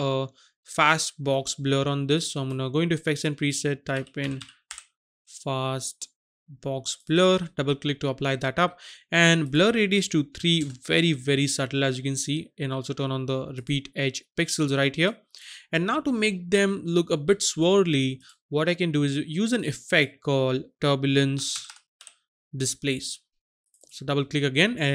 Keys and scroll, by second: 4.2-4.6 typing, 10.4 KP_3, 10.6 Return, 21.5 t, 21.5 u, 21.6 r, 21.9 b, 23.1 typing.